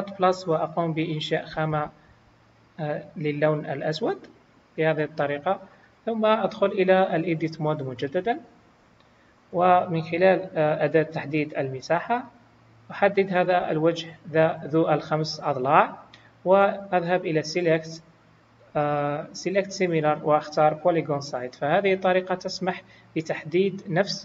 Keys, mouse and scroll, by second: 0.2 click, 1.4 click, 2.5 click, 8.4 Tab, 11.3 click, 13.5 click, 17.4 click.